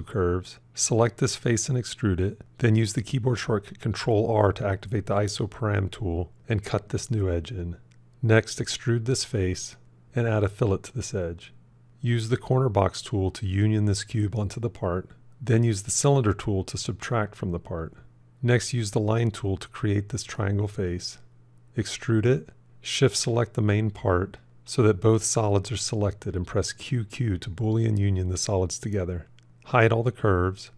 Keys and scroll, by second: 4.6 ctrl+r, 26.3 q.